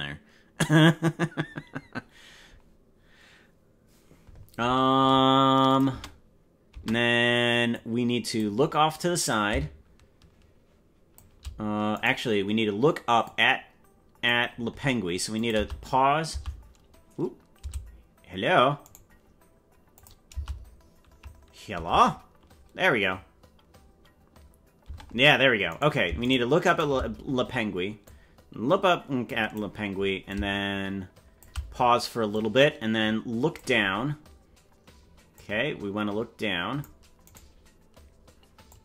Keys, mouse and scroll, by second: 5.7 click, 5.9 space, 6.9 space, 7.7 click, 9.2-11.2 drag, 12.1 right click, 13.2-14.3 drag, 15.3 click, 18.9 right click, 19.9 click, 21.8 space, 24.8 space, 25.7 right click, 26.4 shift+right click, 26.8 right click, 28.0-29.6 drag, 30.2-31.4 shift+drag, 32.3-33.6 drag, 35.3-36.8 drag, 37.4 right click, 38.6-38.8 drag.